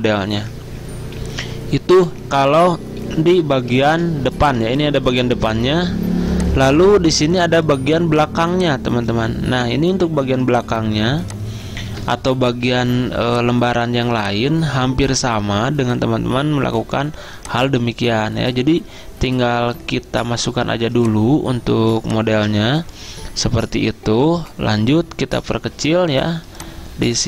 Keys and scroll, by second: 4.0 z, 22.5 alt+Tab.